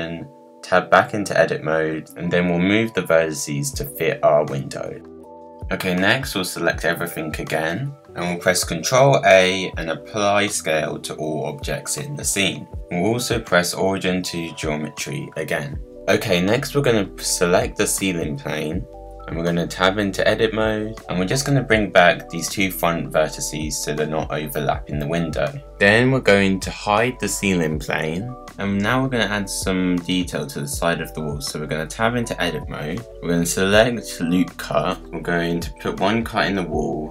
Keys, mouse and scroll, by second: 0.2-0.9 scroll down 1, 0.9-1.7 scroll down 1, 1.7 click, 2.3 middle click, 2.4 g, 2.7 click, 2.8 g, 3.1 middle click, 3.4 g, 4.0 scroll down 1, 4.1 scroll up 1, 4.2 middle click, 4.3-5.4 scroll down 38, 4.3 middle click, 4.5 KP_Decimal, 4.9 middle click, 5.1 g, 5.4 scroll up 1, 5.6 middle click, 6.4 Tab, 6.7-7.3 middle drag, 7.3-7.8 drag, 9.9 ctrl+a, 12.6-14.4 right drag, 14.4 click, 14.8 scroll down 2, 15.0-16.4 middle drag, 16.4 click, 16.7 scroll up 3, 16.9-18.0 middle drag, 18.0-18.5 scroll down 3, 18.9 Tab, 21.0 g, 22.8-24.3 scroll up 9, 24.3 g, 25.5 scroll down 10, 25.7 middle click, 26.0 Tab, 26.3 h, 26.8 scroll down 1, 26.9-27.7 middle drag, 27.7-28.2 scroll up 2, 28.2 scroll down 1, 28.4-29.2 middle drag, 29.2-29.5 scroll up 2, 29.5-30.1 middle drag, 30.1 click, 31.0 Tab, 31.6 scroll down 1, 31.7-33.4 middle drag, 33.4-37.1 drag.